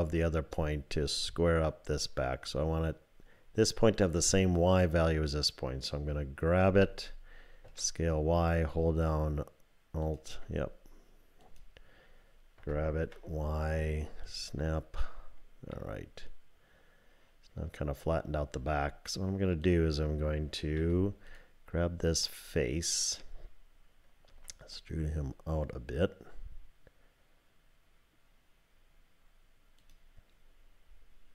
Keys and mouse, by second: 6.7 g, 10.0 ctrl+click, 11.4 click, 12.6 g, 14.2 ctrl+click, 15.7-18.3 middle drag, 19.6 click, 20.8 3, 21.3 click, 22.2 middle click, 24.3 e.